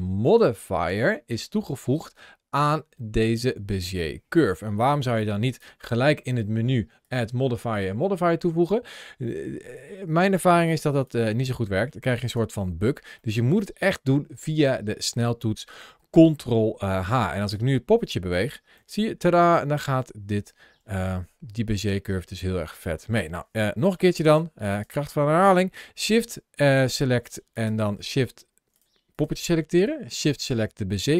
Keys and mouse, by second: 6.9 click, 11.3 Tab, 11.9 middle click, 13.0-16.1 middle drag, 16.8 shift+middle click, 17.3 click, 18.6 g, 21.6 right click, 22.9 middle click, 23.8 shift+middle click, 29.0 click, 30.0 shift+click.